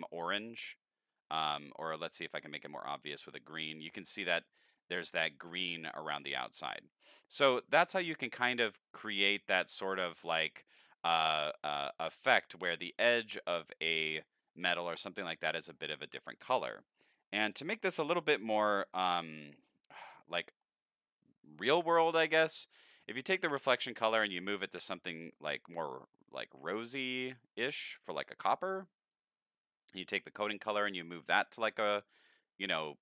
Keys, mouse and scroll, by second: 1.1 click, 2.6 click, 10.4 middle click, 20.2 middle click, 23.2 click, 24.6 click, 25.6 click, 26.9-29.1 drag, 29.8 click, 30.8-33.0 drag.